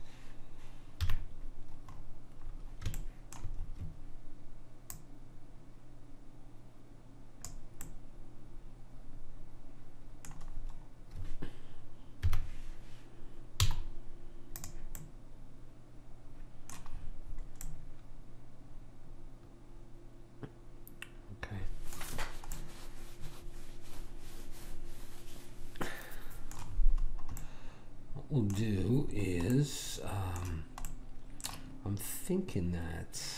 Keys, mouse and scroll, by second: 1.1 KP_3, 2.5 middle click, 5.0 click, 7.9-9.8 middle drag, 12.2 KP_1, 13.7 z, 18.7-19.7 middle drag, 22.5-24.4 middle drag, 26.7 middle click, 27.4-30.9 middle drag.